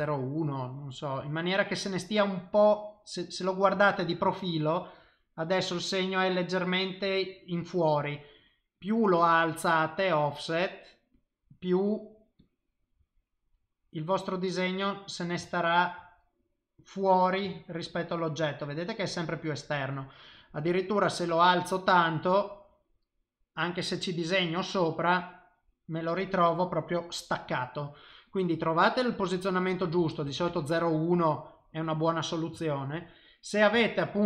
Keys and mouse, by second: 1.2 click, 2.6 middle click, 3.8 ctrl+middle click, 4.3 shift+middle click, 5.1 middle click, 8.7 click, 11.3 middle click, 12.4 click, 13.5 middle click, 16.3 middle click, 17.6 ctrl+middle click, 18.5 middle click, 19.6 middle click, 19.7 ctrl+middle click, 20.5 click, 22.7 middle click, 23.6 click, 24.9 middle click, 28.3 click, 31.1 middle click, 33.1 middle click, 33.8 shift+middle click.